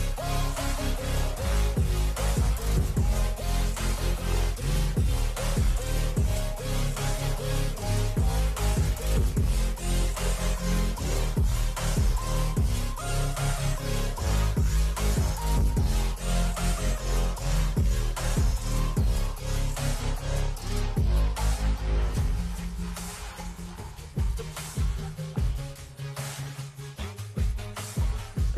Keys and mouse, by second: 7.8 click, 8.5 click, 8.9 Down, 11.1 t, 11.7 click, 13.4-15.8 typing, 16.3 Tab, 16.7 Tab, 17.1 Tab, 19.1-21.6 typing, 23.1 Tab, 23.5 Tab, 23.9 Tab, 25.8-27.8 typing.